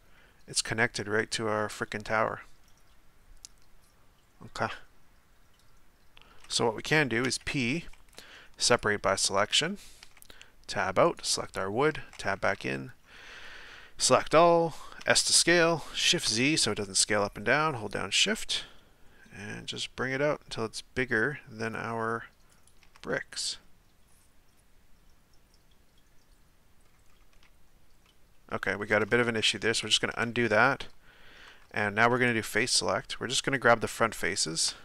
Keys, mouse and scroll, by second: 8.8 p, 10.0 Tab, 11.1 right click, 11.9 Tab, 12.5 a, 15.0 s, 23.1-27.1 middle drag, 27.1 scroll up 2, 28.1-29.6 shift+middle drag, 29.6 ctrl+z, 30.5-32.2 middle drag, 32.2 right click, 32.7 shift+right click, 33.4 shift+right click, 34.3 shift+right click, 34.7-34.8 middle drag.